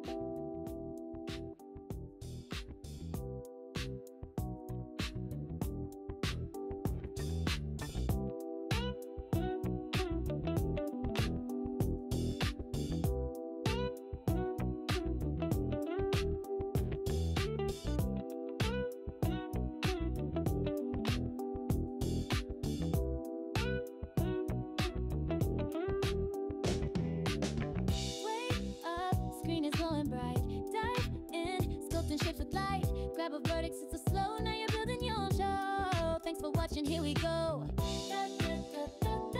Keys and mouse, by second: 0.2 click, 1.7 click, 15.0-16.0 drag, 18.6 super+z, 18.9 click, 32.9-33.6 drag.